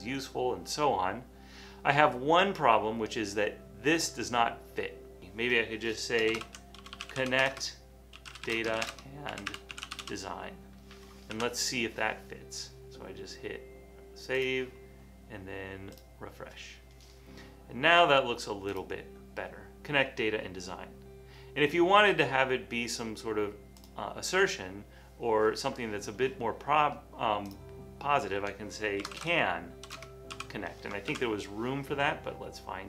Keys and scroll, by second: 6.2-10.6 typing, 11.7 super+s, 28.9-30.4 typing, 31.3 super+s.